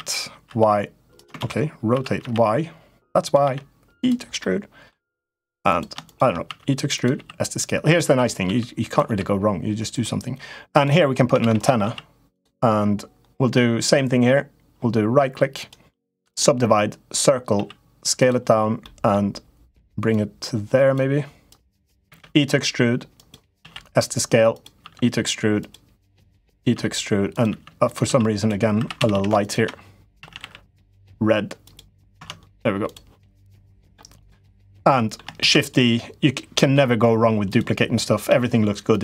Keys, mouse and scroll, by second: 1.2 ctrl+z, 1.7 r, 3.2 e, 4.2 middle click, 5.0 middle click, 5.8 shift+click, 6.2 e, 6.9 s, 8.2 e, 8.8 s, 10.6 click, 11.2 shift+d, 11.6 s, 15.5 right click, 16.8 click, 17.3 s, 17.9 s, 18.7 middle click, 19.9 click, 21.3 click, 21.8 e, 22.9 e, 23.3 s, 24.6 e, 26.3-28.9 typing, 29.2 shift+click, 29.9 a, 30.1 g, 31.9 Tab, 33.4 middle click, 33.9 click, 34.7 middle click, 35.2 shift+d, 36.3 ,, 38.0 ,.